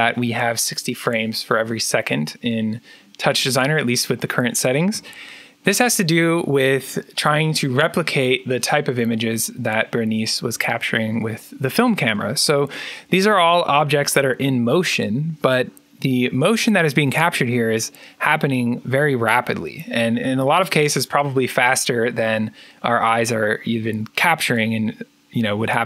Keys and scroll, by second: 4.8 alt+Tab.